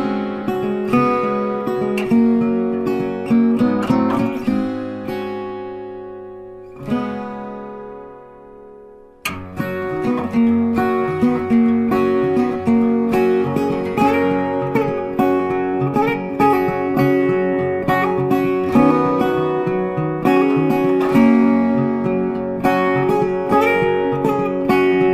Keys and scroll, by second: 10.7 ctrl+t.